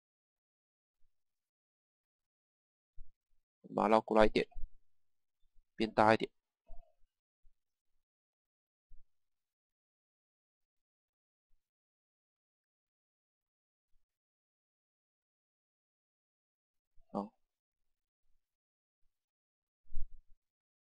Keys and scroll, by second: 5.1 Page_Down, 6.3 Page_Down, 9.0 Page_Down, 12.2 Page_Down, 18.8 Page_Down, 20.6 Page_Up.